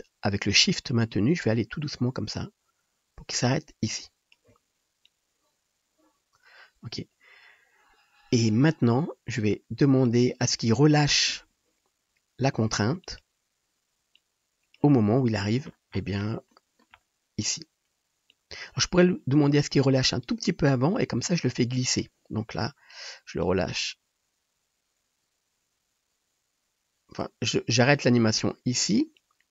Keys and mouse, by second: 13.1-14.2 middle drag, 14.2-29.5 drag.